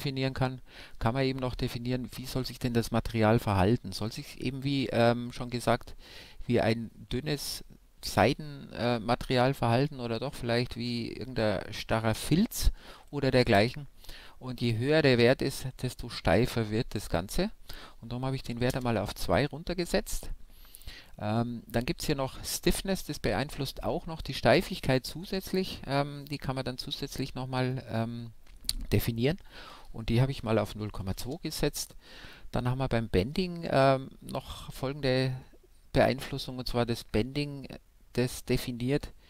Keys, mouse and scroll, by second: 16.3-18.0 drag, 28.3-30.0 drag.